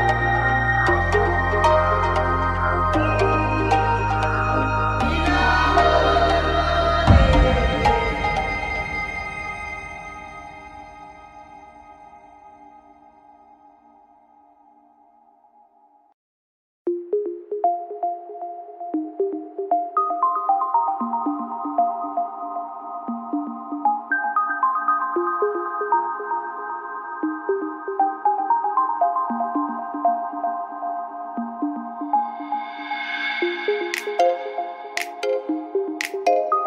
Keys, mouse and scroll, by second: 1.3-2.4 right drag, 2.4-3.5 drag, 4.2-5.4 right drag, 4.8 click, 5.9-7.0 right drag, 6.4-7.6 drag, 8.0-9.1 right drag, 8.4 click, 9.4 right click, 9.7 click, 10.6 right click, 10.9-12.0 drag, 12.2 right click, 12.5 click, 13.3 right click, 13.6 click, 14.6-15.7 right drag, 14.8-16.9 drag, 16.9 right click, 17.2-18.7 drag, 17.8 right click, 18.9-19.9 right drag, 19.2 click, 20.3-21.3 right drag, 20.7 click, 21.5-22.6 right drag, 21.8 click, 24.0-27.2 right drag, 27.0 f, 27.5 right click, 28.3 f, 28.4 a, 32.6 t, 32.7 n, 35.7 click.